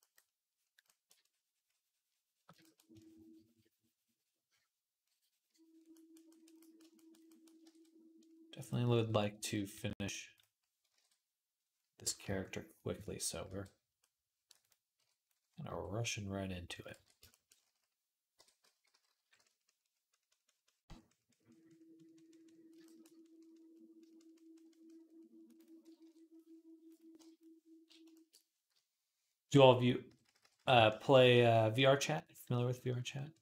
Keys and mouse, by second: 7.5 ctrl+Tab, 9.5 a, 10.8 ctrl+Tab, 12.1 alt+q, 13.3 alt+q, 13.8 middle click, 14.8 KP_3, 15.5 r, 16.8 ctrl+r, 18.2-19.2 typing, 25.8 ctrl+KP_3, 27.0 KP_1, 28.5-30.6 typing, 29.0-33.4 drag.